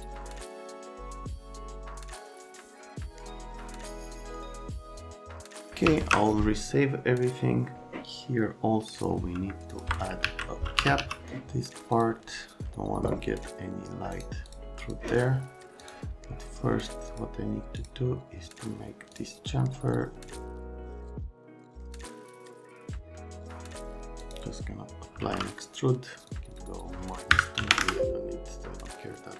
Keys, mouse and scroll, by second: 0.3 click, 1.0 click, 1.3 click, 1.6 click, 1.7 click, 2.1 a, 2.7 click, 3.0 click, 3.2 click, 3.5 click, 3.7 click, 3.9 click, 4.4 1, 4.7 click, 4.8 right click, 4.9 alt+Pause, 5.1 F3, 5.2 x, 5.9 ctrl+s, 10.2 alt+q, 10.5-11.5 typing, 11.9 click, 14.1 right click, 14.4 click, 14.8 click, 15.8 click, 17.1 click, 17.8 click, 19.1 click, 21.0 right click, 21.6 click, 21.9 click, 22.1 click, 22.3 click, 22.8 F3, 23.3 right click, 23.5 F3, 23.8 click, 24.9-25.7 typing, 26.5 click, 26.7 click, 27.3 KP_Subtract, 27.6 KP_2, 27.6 KP_0, 27.8 KP_Enter.